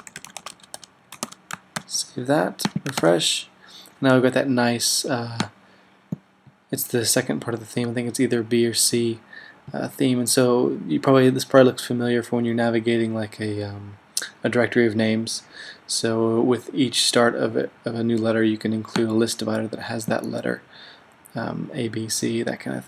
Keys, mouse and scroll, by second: 0.0-3.2 typing, 1.9 super+s, 2.8-3.5 super+drag, 4.2-5.0 typing.